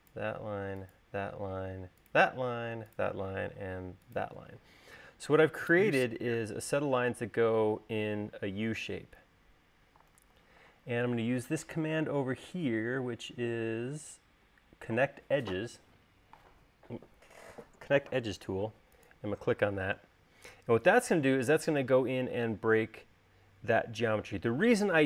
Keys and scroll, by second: 10.6 super+s.